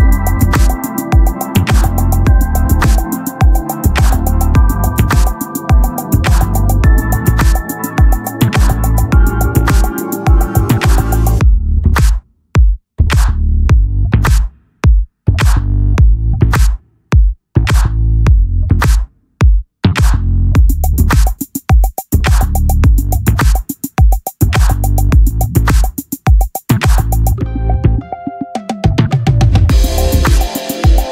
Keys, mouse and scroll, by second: 0.3 t, 0.7 click, 3.4-4.7 drag, 3.4 right click, 4.7 t, 7.4 ctrl+l, 23.3 KP_1, 25.7-26.8 drag, 25.7 z.